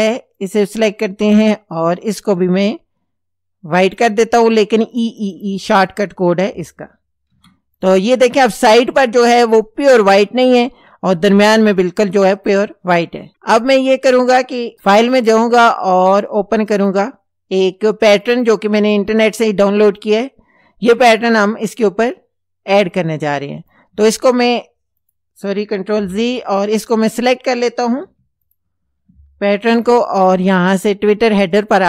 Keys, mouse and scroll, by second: 0.4 click, 2.5-4.2 drag, 5.0 click, 7.3 ctrl+c, 7.8 ctrl+click, 15.1 click, 16.8 click, 18.2 click, 22.9 click, 25.0 click, 26.0 ctrl+z, 26.5 ctrl+click, 28.0 v, 28.5 click, 29.6 ctrl+c, 31.4 click.